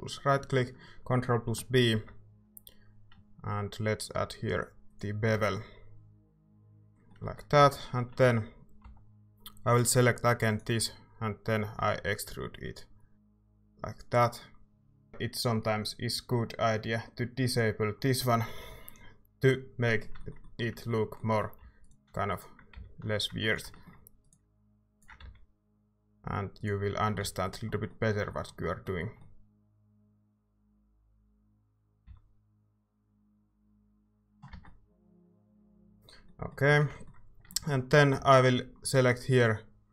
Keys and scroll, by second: 1.9 ctrl+b, 5.3 Tab, 7.6 Tab, 8.2 Tab, 9.0 a, 11.8 e, 21.6 a, 22.8 x, 25.7 x, 27.2 x, 32.6 x, 34.5 Tab, 36.7 Tab, 38.2 c.